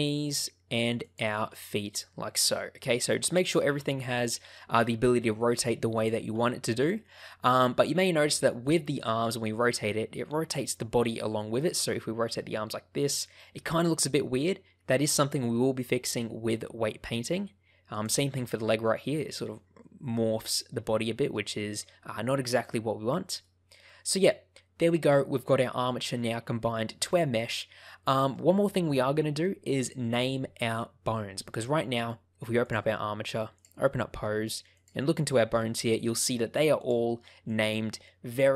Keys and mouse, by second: 0.2 right click, 0.9 click, 1.3 r, 2.5 right click, 3.6 r, 5.3 right click, 5.8 click, 6.2 r, 6.7 right click, 7.9 click, 9.0 r, 10.5 right click, 11.7 r, 17.1 right click, 17.8 click, 18.2 r, 23.2 right click, 23.8-25.0 middle drag, 28.1 middle click, 33.5 click, 34.6 click, 35.1 click, 37.5 click.